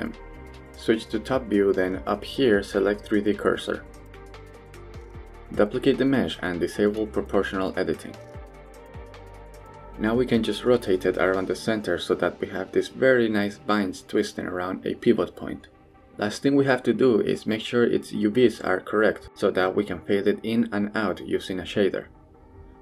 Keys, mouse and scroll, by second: 0.2 KP_7, 1.8-3.5 drag, 5.2 shift+d, 7.2 r, 9.4 click, 10.2 r, 14.7 click, 14.9 g, 18.4-19.7 middle drag, 19.7 scroll down 1, 20.0 Tab, 20.8 click, 21.2-22.8 middle drag.